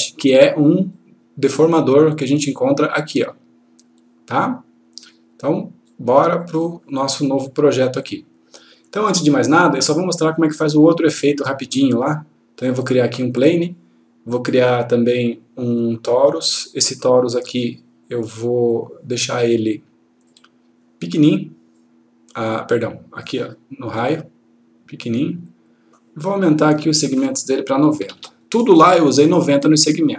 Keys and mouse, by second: 6.5 click, 9.7-13.1 click, 18.6 click, 28.0 typing, 28.4 click.